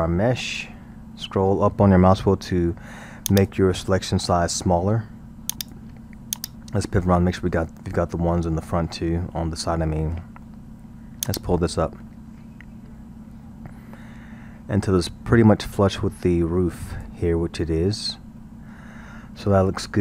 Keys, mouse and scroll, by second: 6.9-11.3 middle drag, 11.3-14.3 drag, 17.4-20.0 middle drag.